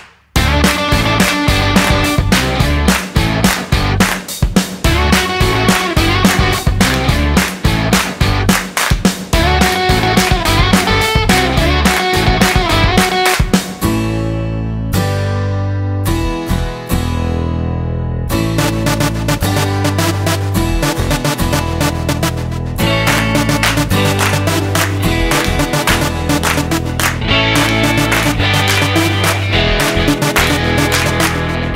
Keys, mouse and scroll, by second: 3.9 click, 9.9 click, 16.6 click, 26.1-27.5 scroll down 16, 27.5 middle click, 30.2-31.7 scroll up 7.